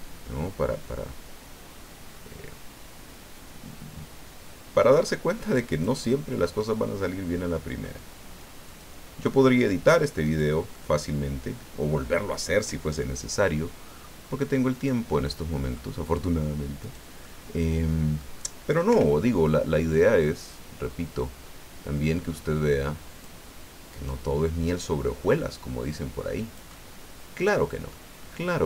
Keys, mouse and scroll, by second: 1.7-2.0 scroll down 2, 3.3 scroll down 2, 5.1-6.1 scroll down 2, 6.1-8.0 drag, 8.7 click, 10.2 right click, 10.7-12.1 drag, 14.7 right click, 15.1 click, 16.8 right click, 17.2-18.3 drag, 18.9 o, 20.0-23.4 drag, 23.9 right click, 24.8-28.1 drag, 26.7-28.1 right drag, 28.2 scroll up 1.